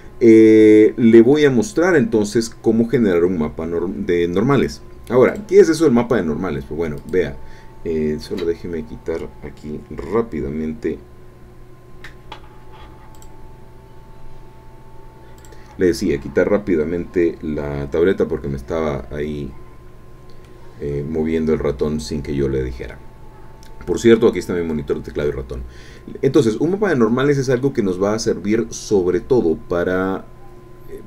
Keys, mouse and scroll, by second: 4.0 click, 5.3-8.6 drag, 13.1 click, 15.4 click, 20.5-22.0 middle drag.